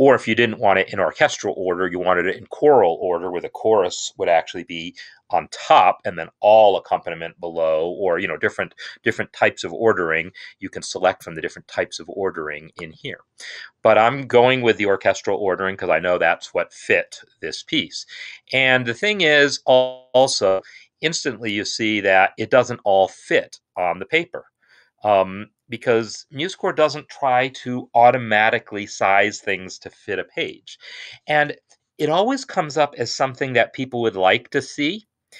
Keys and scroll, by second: 17.5 Home.